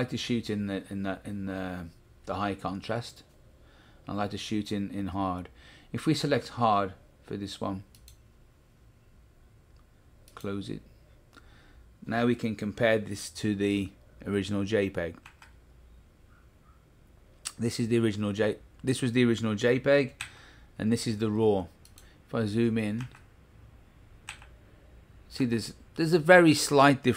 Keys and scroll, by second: 15.2 Right, 20.2 Left, 23.0 Right, 24.2 Left, 25.4 Right.